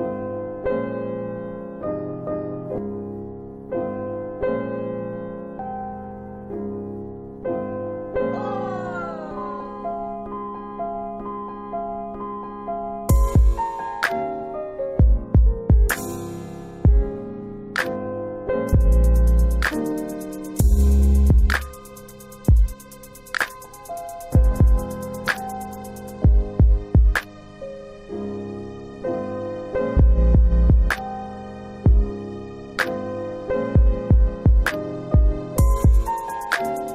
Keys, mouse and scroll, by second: 0.5 ctrl+click, 1.4 middle click, 2.2 ctrl+click, 2.7 shift+double click, 3.1 middle click, 3.8 ctrl+click, 4.2 shift+double click, 4.7 middle click, 5.5 ctrl+click, 6.0 shift+double click, 6.6 alt+w, 7.1 alt+w, 7.9 alt+x, 10.4 alt+w, 10.8 alt+w, 11.3 middle click, 11.8 alt+x, 12.3 middle click, 12.3 scroll up 1, 13.7 click, 15.6 click, 18.1 click, 19.1 ctrl+z, 21.4 click, 22.9 click, 27.6 click, 33.6 click.